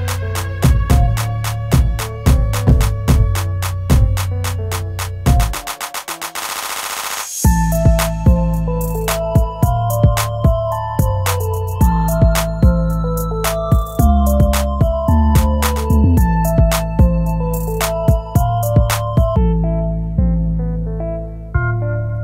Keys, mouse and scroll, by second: 8.9 scroll down 1, 11.2 scroll up 1, 12.3 space, 16.6 scroll up 1.